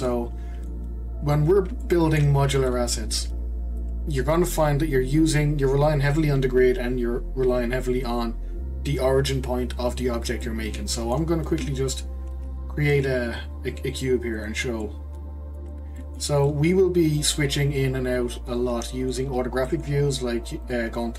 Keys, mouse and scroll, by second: 4.5-7.3 scroll down 1, 10.4-12.3 middle drag, 12.3 shift+a, 14.8-19.5 middle drag, 19.7 middle click, 20.6 click.